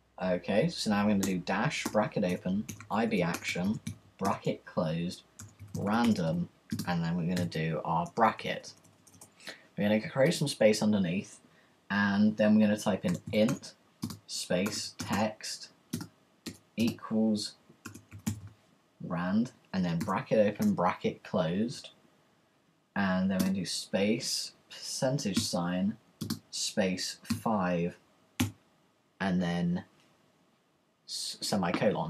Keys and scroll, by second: 1.2-7.7 typing, 8.0 Return, 12.8-16.4 typing, 17.5-20.6 typing, 25.1-28.5 typing.